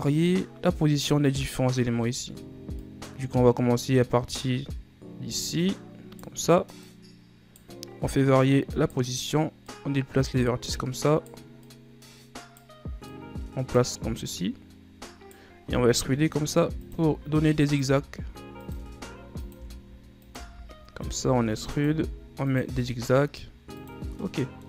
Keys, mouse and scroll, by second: 0.4 right click, 1.6-2.1 scroll up 2, 2.1-2.9 scroll down 3, 2.9 right click, 6.9 right click, 8.2 right click, 9.7 right click, 11.7 right click, 13.2 right click, 14.4 right click, 15.8 e, 17.1-22.7 typing, 24.3-24.6 middle drag.